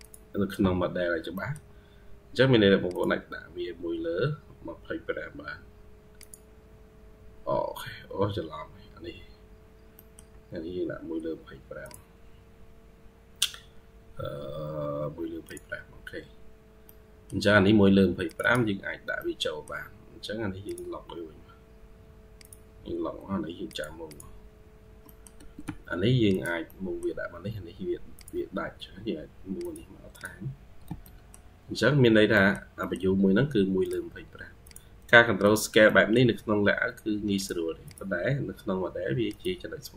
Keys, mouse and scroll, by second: 1.2 middle click, 7.6-8.3 scroll down 18, 8.4-9.8 scroll up 10, 9.8 middle click, 16.7 middle click, 18.3 double click, 18.7-19.0 scroll down 2, 19.0 middle click, 23.9 double click, 24.9 middle click, 25.2 Escape, 25.5 Escape, 26.6 middle click, 28.3-29.4 scroll up 2, 30.0 double click, 30.7 Escape, 30.9 middle click, 32.0 scroll down 1, 32.2 middle click, 32.6 middle click, 35.7 middle click, 37.7 double click.